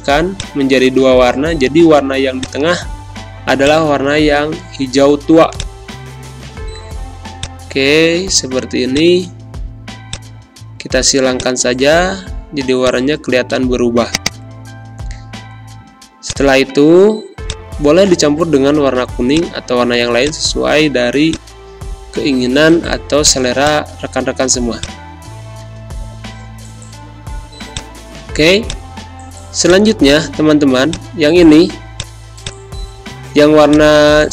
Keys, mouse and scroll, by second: 24.1 z, 24.7 click, 25.7 space, 25.9 click, 26.2 space, 27.7 click, 28.4 space, 28.6 click, 28.9 space, 29.6 click, 29.8 space, 30.8-34.3 drag.